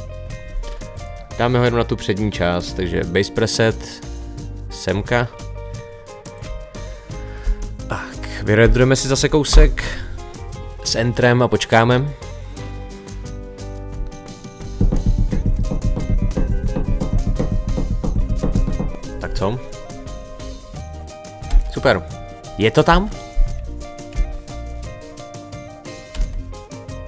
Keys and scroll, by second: 21.5 space, 22.9 space, 24.2 space, 26.2 space.